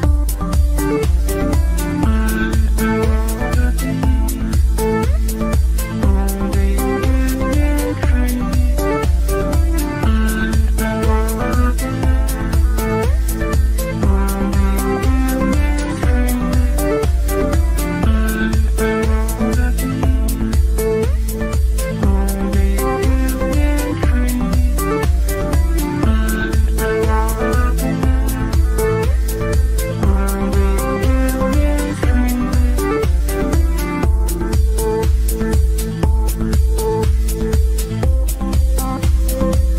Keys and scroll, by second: 10.2 g.